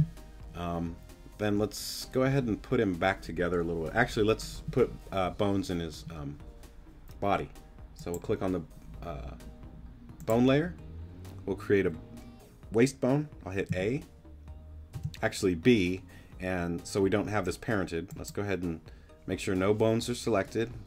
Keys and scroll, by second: 13.7 a, 14.9 b.